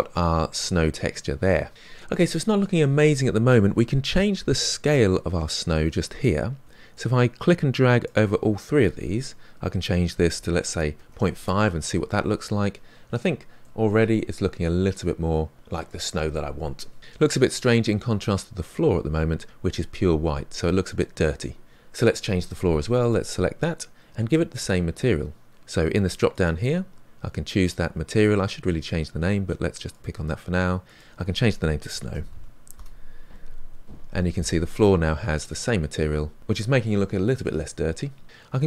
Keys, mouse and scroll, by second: 0.4-1.1 scroll down 3, 1.1 middle click, 1.7-2.7 scroll down 5, 2.7-4.1 scroll down 1, 4.7-5.3 scroll down 1, 5.3-6.7 scroll down 1, 11.3 click, 13.6-17.3 middle drag, 17.3 click, 23.1 click, 26.6-30.0 drag, 32.7-34.1 drag, 34.1-34.7 scroll down 4, 34.7-36.4 middle drag, 36.4-38.2 scroll up 2, 38.2-38.6 scroll up 1.